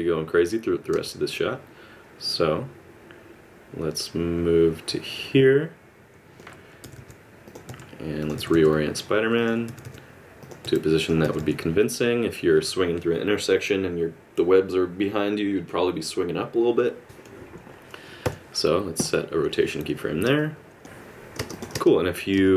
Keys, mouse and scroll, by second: 0.9 space, 1.3 click, 6.8 r, 7.7 r, 9.7 r, 10.6 r, 20.4 click, 20.9 space, 22.1 space, 22.5 click.